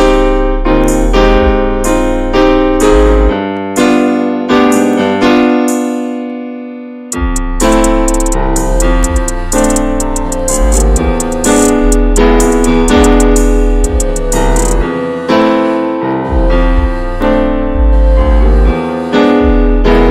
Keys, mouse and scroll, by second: 0.0 drag, 0.3-0.6 scroll down 3, 0.6-1.6 middle drag, 1.6 shift+scroll up 1, 2.0-7.6 middle drag, 7.6 ctrl+s, 8.3 click, 8.8 click, 9.2 click, 9.7 click, 10.8 `, 11.2-12.7 middle drag, 12.7 Tab, 13.0 middle click, 13.7 Tab, 13.9 click, 14.1-15.9 shift+middle drag, 15.9 ctrl+s, 16.5-17.5 middle drag, 17.5 click, 17.7-20.1 shift+middle drag.